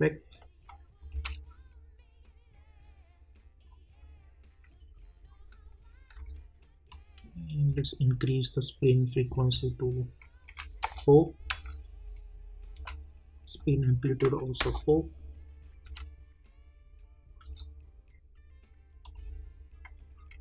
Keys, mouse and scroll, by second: 0.7 click, 1.1 space, 6.1 space, 6.9-9.4 drag, 10.8 Return, 11.5 space, 13.6 click, 14.6 Return, 15.8 space, 19.0 click.